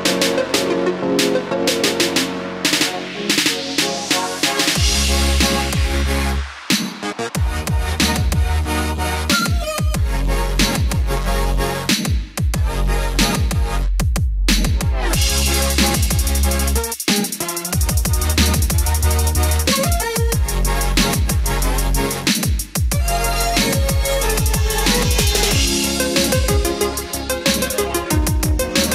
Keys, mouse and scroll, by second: 3.5-3.9 scroll up 1, 4.2 click, 4.5-5.0 scroll down 1, 5.3 scroll up 1, 6.4 ctrl+click, 6.8-7.1 scroll down 1, 8.0-14.9 drag, 15.6-19.0 middle drag, 20.1 scroll up 1, 21.8 click, 22.2 scroll down 1, 23.2 ctrl+click, 23.6-24.4 scroll down 1, 24.9-27.1 drag, 28.8 middle click.